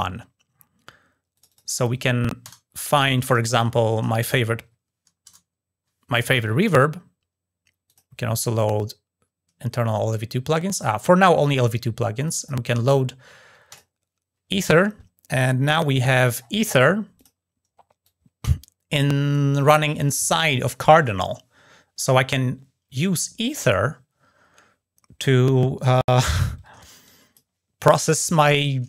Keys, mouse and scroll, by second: 1.1 click, 1.2 click, 7.6 click, 9.8 drag, 12.0 click, 12.4 click, 13.5 click, 15.3-15.8 scroll down 1, 16.2 scroll up 1, 17.0 click, 17.8-19.2 drag, 23.4-27.1 drag.